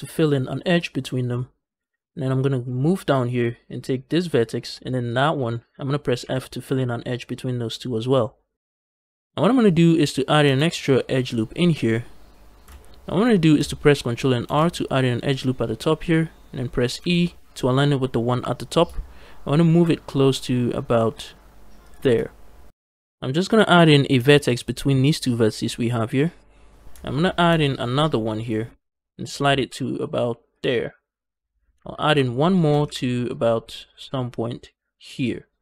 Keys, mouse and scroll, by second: 1.8 shift+middle click, 4.0 click, 4.9 shift+click, 6.0 f, 10.3 ctrl+r, 12.6 ctrl+z, 12.6 shift+right click, 14.3 ctrl+r, 16.8 e, 21.7 shift+click, 24.0 ctrl+r, 27.3 ctrl+r, 28.3 click, 28.5 g, 28.7 g, 30.4 shift+click, 31.9 ctrl+r, 32.4 click, 32.6 g, 32.7 g, 35.0 click.